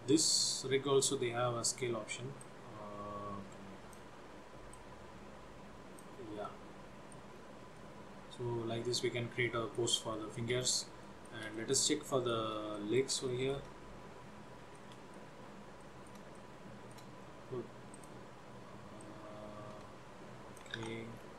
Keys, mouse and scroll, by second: 2.5 click, 4.8 click, 6.6 middle click, 7.5 scroll down 2, 7.9 middle click, 10.3 shift+middle click, 10.7 scroll down 1, 11.1 shift+middle click, 11.7 middle click, 12.1 shift+middle click, 12.9 middle click, 13.4 shift+middle click, 13.9-14.7 scroll up 5, 14.9 shift+middle click, 15.6 scroll up 1, 15.9 middle click, 16.5 shift+middle click, 17.4 scroll down 1, 18.1 click, 19.0 click, 21.2 ctrl+z.